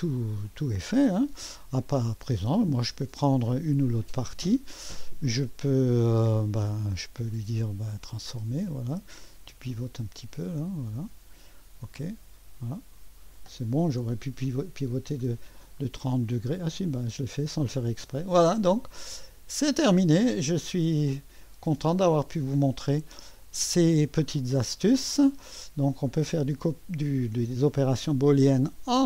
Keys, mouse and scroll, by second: 2.6 click, 7.3 middle click, 7.6 right click, 8.2 click, 10.0-14.0 drag, 14.0 1, 15.1 2, 15.8-16.7 scroll up 1, 16.9 click, 18.2 scroll down 1, 19.0 click, 19.9 click, 19.9 right click, 20.4 middle click, 21.8-22.3 scroll up 1, 24.1-26.7 drag, 25.7 typing.